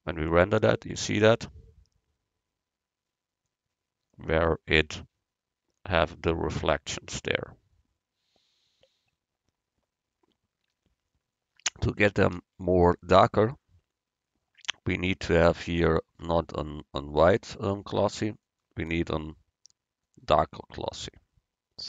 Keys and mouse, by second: 3.5-5.3 middle drag, 6.8-8.8 middle drag, 16.4-18.3 drag.